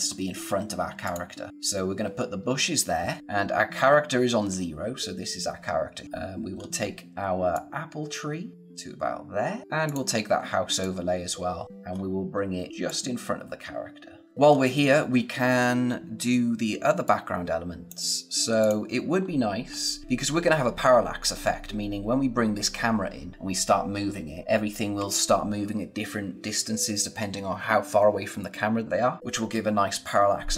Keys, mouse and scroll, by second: 0.1-1.0 scroll up 1, 1.0 click, 1.5-1.9 scroll up 1, 6.0-6.5 scroll down 1, 6.5-7.5 scroll up 1, 7.5 click, 11.6-12.8 scroll up 1, 12.8 click, 14.2 scroll down 1, 14.4-16.3 scroll up 1, 16.7 space, 17.0 click, 17.2 space, 18.6 click, 19.1-19.6 scroll down 1, 19.6-21.0 scroll up 1.